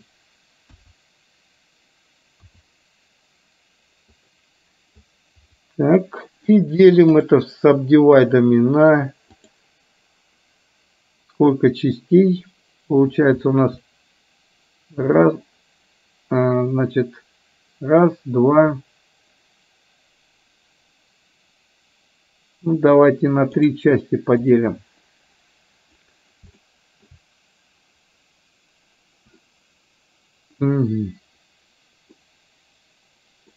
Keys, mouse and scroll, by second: 0.7 KP_1, 2.7 r, 5.1-6.1 drag, 7.1 right click, 22.9 click, 24.2-25.2 right drag, 26.7 shift+middle click, 32.2-33.5 middle drag.